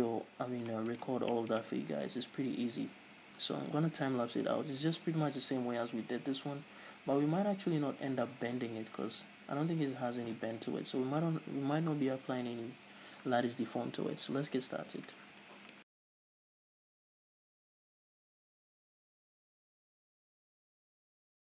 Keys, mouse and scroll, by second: 0.1 KP_Divide, 1.1 right click, 1.6-16.1 middle drag, 2.3 KP_1, 3.5-4.3 scroll up 2, 4.3-7.6 scroll up 1, 15.8 Tab, 15.9 a, 16.1 click, 16.5 scroll up 1, 17.0-18.1 shift+middle drag, 17.1-17.7 shift+scroll up 2, 17.2 z, 18.0 a, 18.1 click, 18.4 shift+right click, 18.9 click, 19.4 shift+middle click, 19.8 click, 20.6 shift+click, 20.9-21.5 scroll down 4, 21.2 ctrl+i, 21.2 middle click.